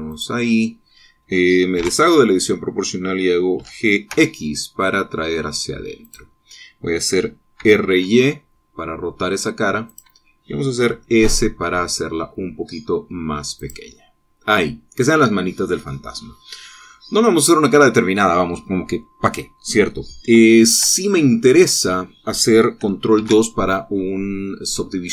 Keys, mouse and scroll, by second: 0.7 click, 2.4 o, 4.2 g, 4.7 x, 6.7 click, 8.2 r, 8.5 y, 10.5 click, 11.5 s, 14.2 click, 14.6-15.9 middle drag, 21.5 Tab, 22.0-23.2 drag, 23.8 ctrl+2, 24.6 middle click, 24.6-25.1 drag.